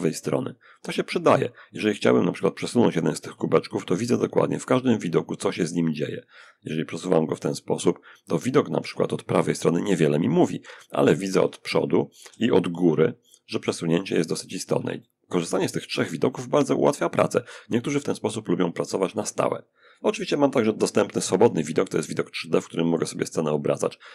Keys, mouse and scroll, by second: 0.1-0.7 scroll down 2, 1.1 click, 2.4 g, 8.0 Escape, 10.5 g, 11.5 Escape, 12.1 g, 13.9 Escape, 21.0-24.1 drag.